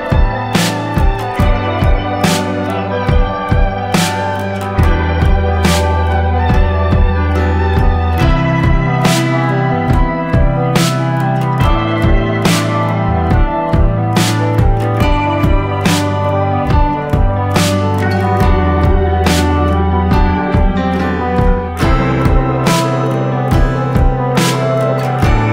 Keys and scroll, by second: 0.4 ctrl+-, 1.1 ctrl+-, 21.2 ctrl+-, 21.5 ctrl+-, 21.7 ctrl+-.